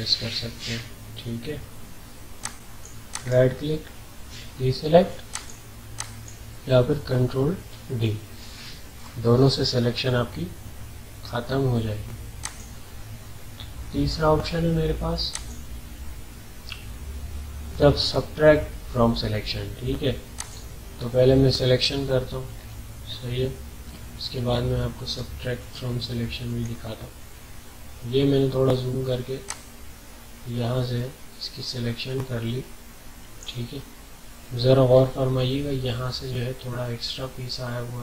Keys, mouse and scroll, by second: 2.4 click, 3.1 right click, 5.3 click, 7.6 ctrl+d, 12.4 click, 15.3 click, 20.4 click, 22.5 alt+scroll up 1, 23.4 ctrl+scroll up 2, 23.4-24.1 ctrl+scroll down 2, 24.4-25.7 alt+scroll up 4, 25.8-26.8 ctrl+scroll down 3, 29.4-34.8 drag, 34.8 alt+scroll up 1, 35.4 alt+scroll up 1.